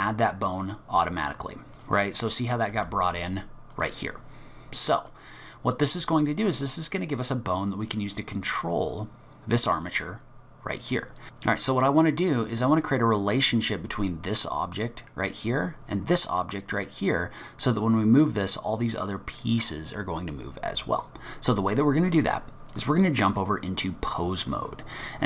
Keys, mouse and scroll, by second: 2.3 click, 2.7 g, 4.3-4.6 scroll down 2, 4.6-5.2 scroll up 2, 5.2 middle click, 10.9 click, 22.8 click.